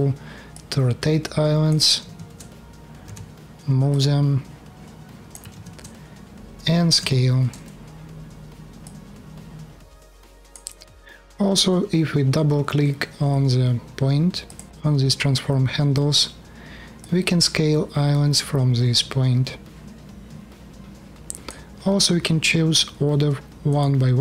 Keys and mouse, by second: 1.7 ctrl+z, 2.8 g, 5.4 ctrl+z, 6.7 s, 9.8 click, 10.5 ctrl+z, 14.6-16.8 middle drag.